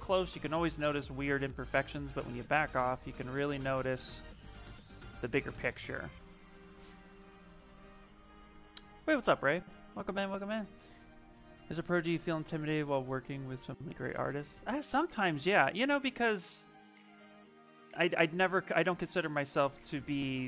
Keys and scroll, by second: 19.5 s.